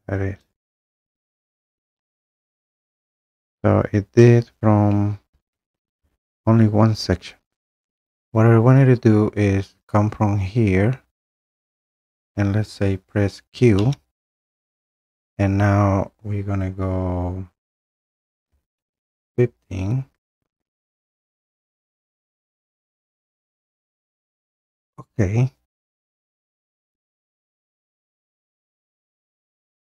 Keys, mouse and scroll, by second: 0.3-1.0 typing, 0.5 click, 1.8 click, 2.8-3.3 scroll, 3.7 scroll, 4.6-5.6 scroll, 8.0 click, 11.5 click, 13.8 q, 18.4-18.8 typing, 24.8 click, 27.7 click.